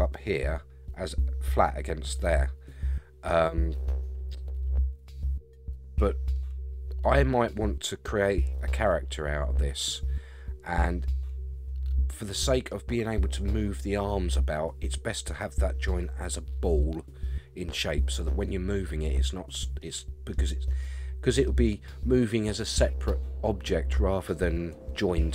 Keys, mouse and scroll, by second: 6.3-12.7 middle drag, 18.5 scroll down 1, 19.8 middle click, 20.8 middle click, 22.3 middle click.